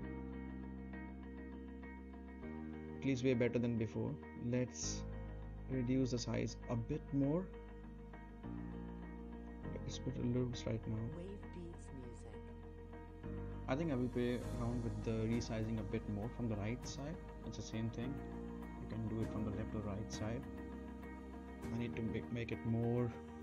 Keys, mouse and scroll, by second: 0.4-2.6 right drag, 4.0 click, 5.2 Right, 7.9-8.8 right click, 8.9 space, 13.0 space, 13.4-14.4 right drag, 16.2 click, 17.1 Left, 20.8 click, 21.3 Left.